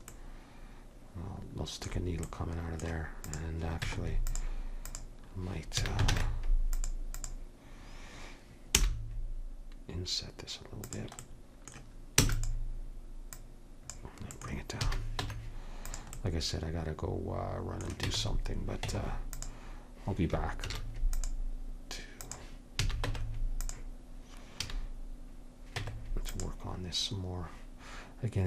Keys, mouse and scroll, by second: 3.3 click, 3.9 Tab, 5.9 a, 6.2 ctrl+Tab, 8.8 i, 12.3 e, 13.4-15.2 drag, 14.4 right click, 14.9 a, 15.2 middle click, 15.3 Tab, 16.1 Tab, 18.2 Tab, 18.9 Tab, 20.7 ctrl+r, 22.9 a, 23.1 Tab, 24.7 a, 25.9 Tab.